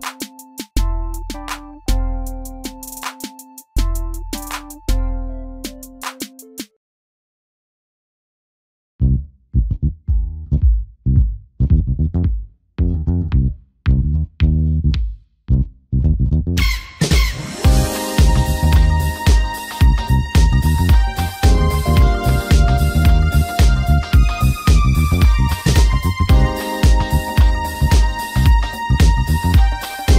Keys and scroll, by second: 5.4 ctrl+d.